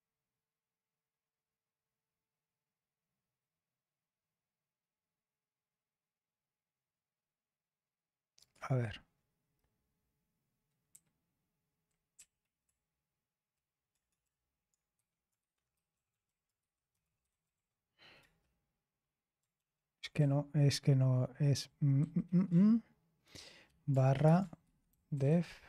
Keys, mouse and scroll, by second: 7.1-7.9 scroll down 1, 7.9-8.3 scroll down 1, 8.3 click, 10.8 BackSpace, 12.1 Right, 12.6-18.0 typing, 18.1 Return, 20.1 ctrl+p, 20.8 Left, 22.4-23.2 Left, 23.4 <, 25.1 BackSpace.